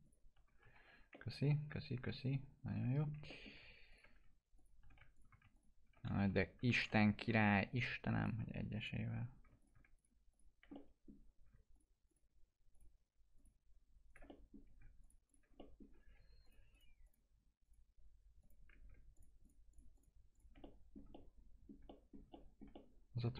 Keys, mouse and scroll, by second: 0.0 shift+click, 0.7 z, 1.1 middle click, 2.2 alt+middle click, 3.8 ctrl+click, 6.2 ctrl+z, 6.7 ctrl+click, 7.4-7.8 scroll up 1, 8.1 ctrl+click, 10.7 alt+middle click, 11.7 ctrl+click, 14.2 alt+middle click, 15.0 ctrl+click, 15.5 middle click, 16.4 ctrl+click, 19.1 ctrl+click, 20.6 alt+middle click, 22.7 alt+middle click.